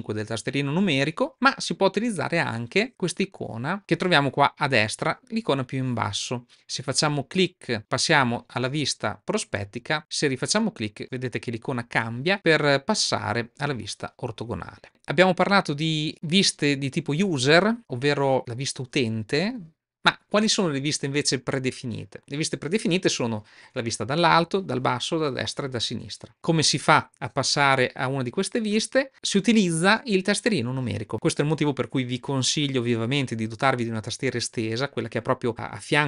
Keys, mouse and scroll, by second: 0.7 KP_3, 1.3 KP_3, 7.8 click, 10.2 click.